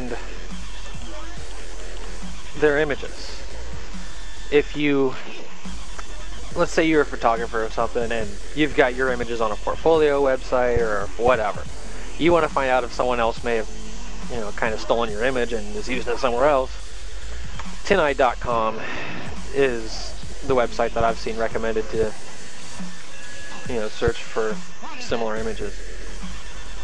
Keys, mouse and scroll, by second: 1.5-4.6 typing, 5.8 Return, 15.9 click, 17.7 ctrl+v, 18.6 Return.